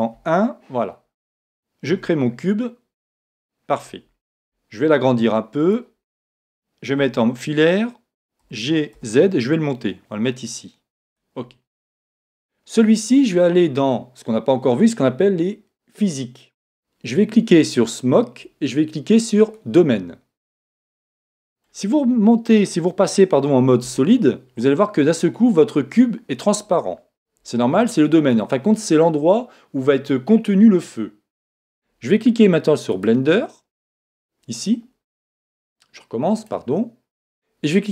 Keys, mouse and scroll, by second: 0.1 KP_1, 1.9 shift+a, 4.4 s, 5.7 click, 7.0 z, 8.4 g, 10.5 g, 11.1 click, 16.0-21.3 drag, 21.3-23.2 middle drag, 23.8 z, 34.0 right click.